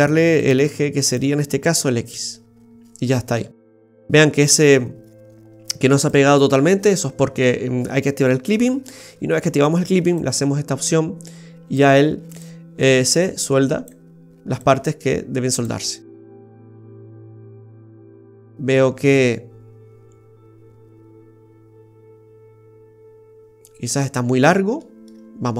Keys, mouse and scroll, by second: 0.4 click, 1.1 click, 2.1 click, 2.4-2.7 scroll up 5, 3.3 middle click, 6.0 click, 8.6 Tab, 10.1 click, 12.4 click, 14.5 click, 16.0-16.8 scroll down 3, 16.8 middle click, 16.8 scroll down 2, 20.3 middle click, 24.1-24.6 scroll up 1, 24.6 scroll up 1, 24.8 shift+middle click.